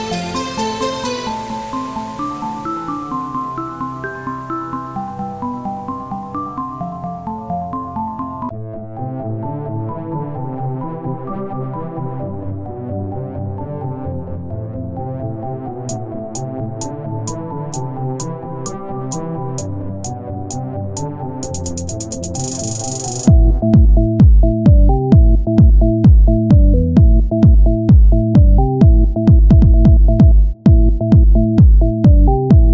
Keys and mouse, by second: 0.4 KP_3, 1.9 z, 4.5-5.7 drag, 6.3 z, 7.8-10.1 drag, 10.1 c, 10.8 z, 11.8-13.1 drag, 13.7-15.1 drag, 14.7 z, 15.1 c, 15.5 z, 16.9-20.4 drag, 22.4-23.5 drag, 24.3-26.6 drag, 28.5 c, 29.0 z, 29.8 KP_1, 30.9 r.